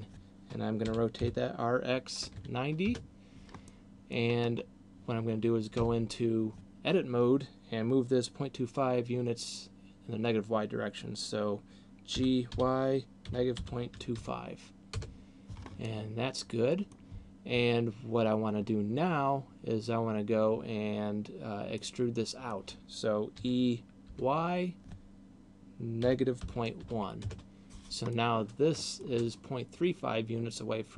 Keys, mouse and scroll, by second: 0.8 r, 3.8 middle click, 4.6 scroll up 2, 5.8 Tab, 12.3 g, 15.8 middle click, 21.8 middle click, 23.6 e, 28.3 middle click.